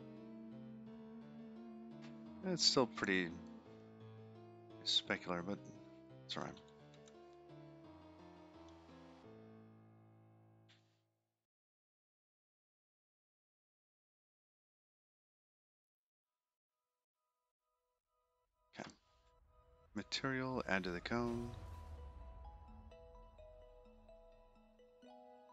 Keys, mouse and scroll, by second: 5.1 middle click, 7.8 Tab, 8.4 click, 9.4 4, 10.7-11.3 scroll up 4, 11.5 shift+middle click, 12.3 middle click, 15.1 scroll down 3, 15.7-16.3 scroll down 5, 16.7 click, 18.7 click, 19.1-19.8 scroll down 3, 20.6 click.